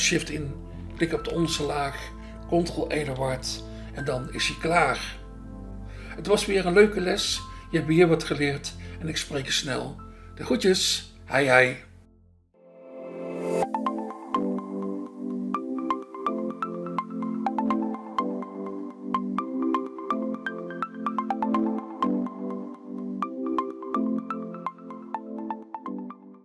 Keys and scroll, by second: 3.1 ctrl+e.